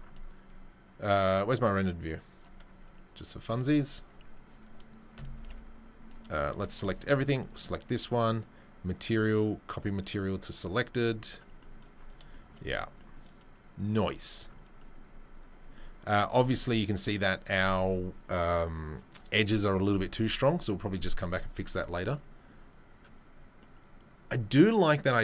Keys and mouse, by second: 5.3 ctrl+a, 6.5 a, 7.2 shift+right click, 7.2-9.7 shift+middle drag, 9.7-11.4 drag, 11.4-21.3 middle drag, 21.3 click, 21.4-25.2 middle drag.